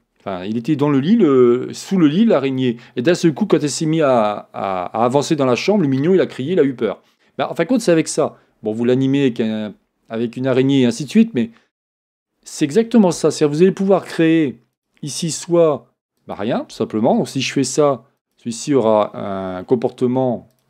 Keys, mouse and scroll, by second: 11.6-12.2 scroll up 2, 14.7 scroll down 1, 14.8-20.6 drag.